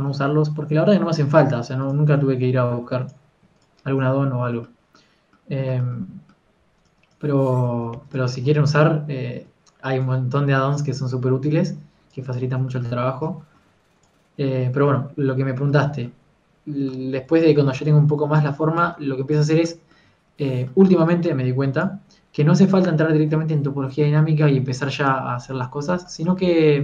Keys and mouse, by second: 7.5 f, 8.7 ctrl+z, 9.0 f, 13.4 ctrl+z, 15.0-16.7 drag, 18.3-21.5 drag, 22.3 g, 22.5 f, 24.2 KP_3, 25.8 f.